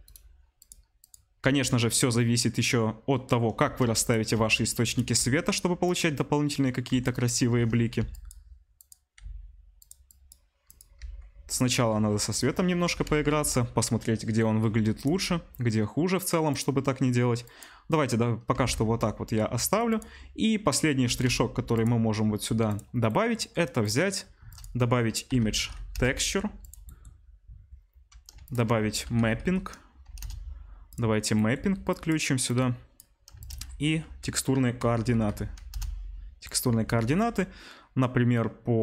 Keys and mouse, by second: 1.1-8.3 middle drag, 1.4 g, 3.7 shift+d, 4.3 r, 5.1 g, 6.8 r, 7.9 Delete, 8.3-8.9 drag, 8.9-10.0 middle drag, 9.2 s, 10.0 click, 10.7-17.4 middle drag, 11.1 g, 12.0 r, 13.0 r, 15.2 g, 17.4 click, 17.5-38.8 middle drag, 18.5 r, 21.0 r, 24.3 shift+a, 28.4 shift+a, 31.8-36.5 drag, 33.3 shift+a, 35.2 o.